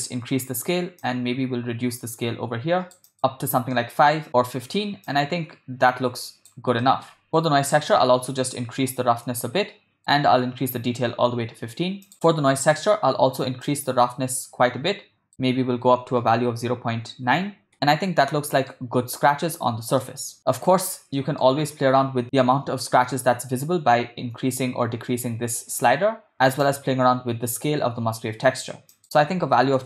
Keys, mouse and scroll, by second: 1.0-3.0 drag, 3.1 click, 3.7 middle click, 5.1-6.5 drag, 6.8 middle click, 7.3-10.0 drag, 12.1 click, 13.7-17.7 drag, 17.7-18.7 ctrl+middle drag, 20.0-20.4 shift+middle drag, 21.1 middle click, 22.2-26.3 drag, 26.3 middle click, 26.7-28.6 drag, 28.9 click.